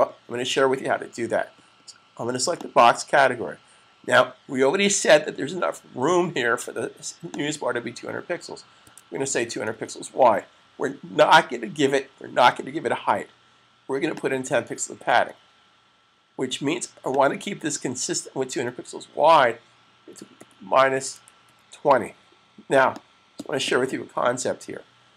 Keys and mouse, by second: 2.3 click, 7.1 click, 8.7-9.6 typing, 13.8 click, 14.6-15.5 typing, 17.0 click, 20.0-21.2 typing, 22.7 click.